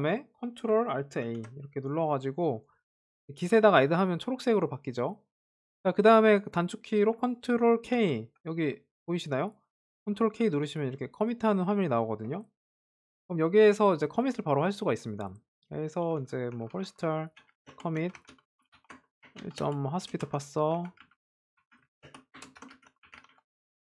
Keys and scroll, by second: 1.3 shift+Down, 2.3 ctrl+alt+a, 8.1 ctrl+k, 8.8 ctrl+k.